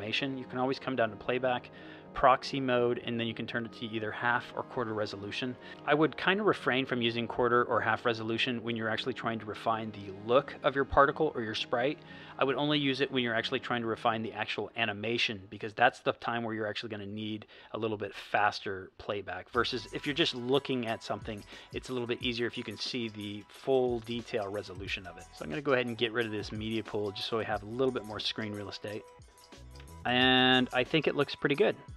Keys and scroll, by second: 29.2 space.